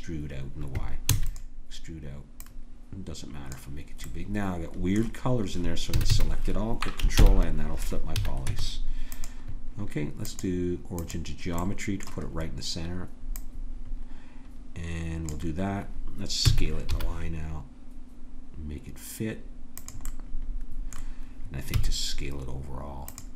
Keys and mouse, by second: 1.1 e, 2.4-5.9 drag, 5.9 a, 6.1 a, 7.1 ctrl+n, 8.2 a, 8.5 Tab, 10.3-11.6 drag, 16.4 s, 20.1-22.1 middle drag, 21.8 s.